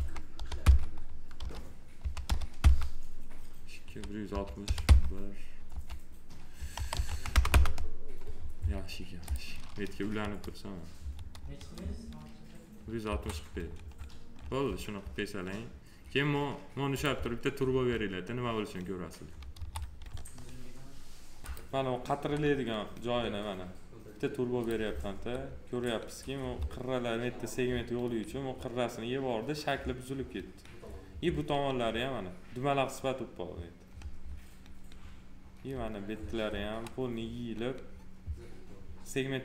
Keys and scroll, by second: 0.6 Return, 1.4 1, 2.5 Return, 4.8 Return, 5.6 6, 6.7 BackSpace, 6.9 1, 7.5 Return, 10.2 F4, 13.0 F4, 19.5 F4, 25.1 F4, 26.3 F4, 35.6 F4.